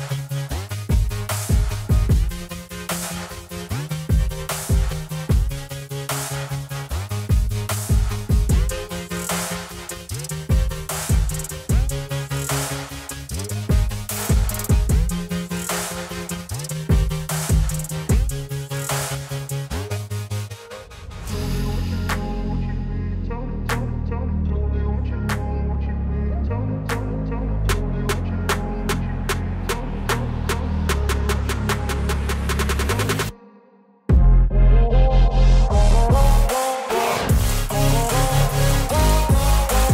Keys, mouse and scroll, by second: 1.5 click, 3.2 space, 3.3 click, 4.6 click, 6.2 ], 6.3 ], 7.7 ], 8.0 alt+click, 9.6 space, 9.7 click, 9.8 space, 10.1 alt+click, 10.5 space, 10.8 click, 10.9 space, 11.2 alt+click, 12.3 space, 12.4 click, 12.5 space, 12.8 alt+click, 13.1 space, 13.2 click, 13.3 space, 13.7 alt+click, 14.7 space, 14.8 click, 16.1 click, 19.1 ], 21.4 space, 21.4 click, 21.5 space, 24.0-26.8 typing, 24.1 click, 24.9 click, 25.6 click, 29.4 z, 29.6 click, 30.8 click, 34.5 click, 35.5 Up, 35.6 Down, 37.1 Up, 38.3 Down, 39.0 click, 39.1 Up.